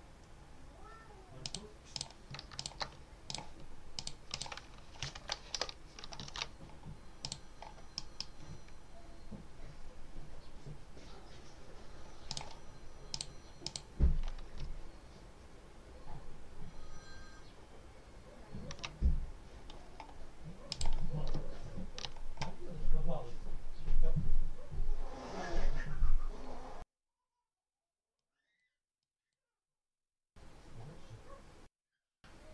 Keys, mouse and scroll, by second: 1.3 click, 1.8 click, 2.4 shift+click, 3.8 click, 5.0 1, 5.4 Return, 6.2 ctrl+s, 7.1 click, 7.8 click, 12.2 click, 13.0 click, 13.5 click, 15.0 ctrl+scroll up 2, 15.4 ctrl+scroll down 2, 17.4 ctrl+scroll down 2, 17.8 ctrl+scroll up 2, 20.6 click, 21.4 ctrl+scroll up 2, 28.0 click, 28.9 click.